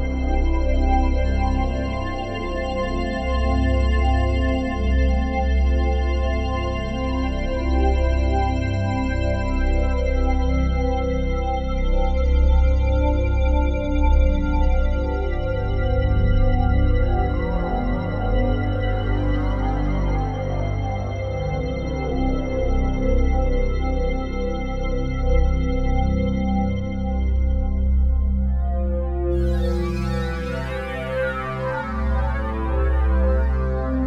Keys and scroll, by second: 15.6 s, 17.2 c, 30.0 s.